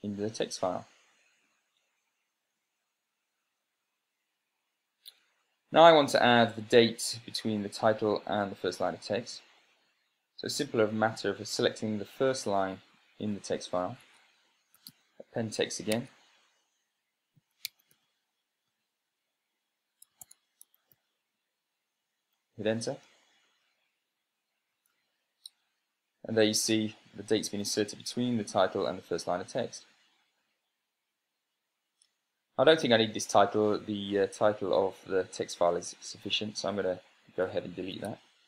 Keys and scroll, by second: 2.5 Left, 5.8 Right, 12.1 Up, 14.7 Tab, 15.2-16.1 typing, 16.6 Tab, 17.8-18.9 typing, 20.6-21.5 typing, 23.5 Return, 25.4 super+space, 27.0 Right.